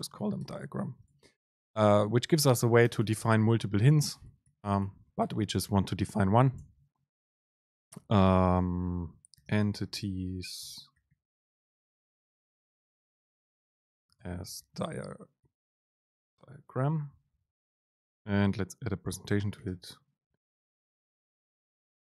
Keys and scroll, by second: 2.9 Down, 4.2 BackSpace, 6.7 Home, 7.0 Right, 10.7 BackSpace, 17.6 End.